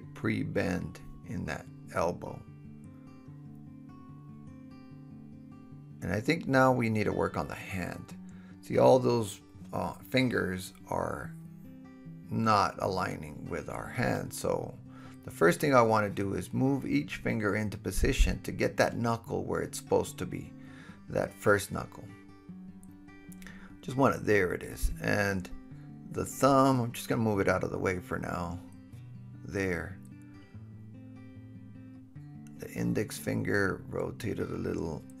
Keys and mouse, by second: 4.4 KP_1, 8.9-10.3 middle drag, 9.8 KP_Decimal, 11.1 KP_7, 13.0-14.7 drag, 15.9 g, 18.3-21.4 drag, 21.4-24.6 shift+middle drag, 23.6 g, 24.6 click, 25.1-26.5 middle drag, 25.8 g, 26.5-28.0 drag, 28.0 shift+middle click, 28.0-32.6 shift+drag, 28.5 g, 29.9 g, 30.6 r, 31.3 g, 32.6 middle click, 32.7 shift+click, 33.0-35.2 shift+middle drag, 34.4 r.